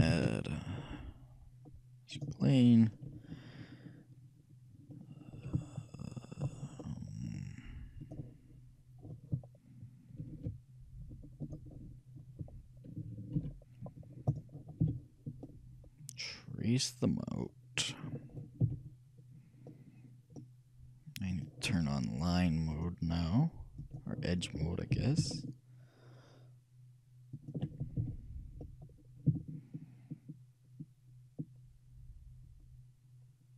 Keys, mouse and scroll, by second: 0.2 shift+a, 7.4-9.2 drag, 10.4 alt+m, 13.5 alt+m, 14.9 g, 18.7 e, 22.8-24.6 drag, 25.1 g, 28.1 e.